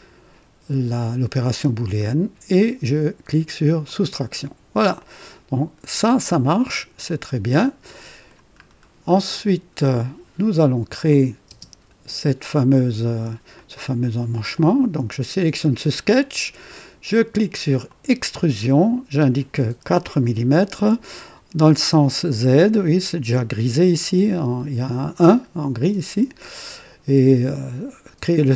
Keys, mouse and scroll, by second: 3.8 click, 5.0-8.5 drag, 8.7 scroll down 2, 9.1 click, 11.1 click, 11.5 space, 13.5 click, 17.8 click, 19.9 KP_4, 19.9 KP_4, 28.2-28.5 drag.